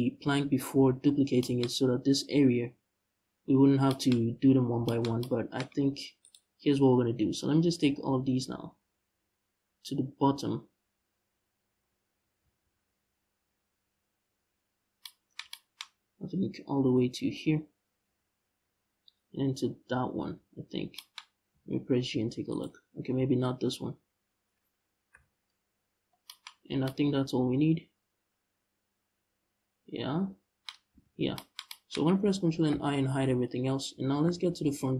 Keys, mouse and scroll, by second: 0.4 h, 5.8 right click, 21.2 g, 22.2 right click, 24.8 shift+l, 26.2 h, 30.6 ctrl+z, 30.8 scroll down 1, 32.4 ctrl+i, 32.9 h, 33.9 KP_1, 34.3 KP_5.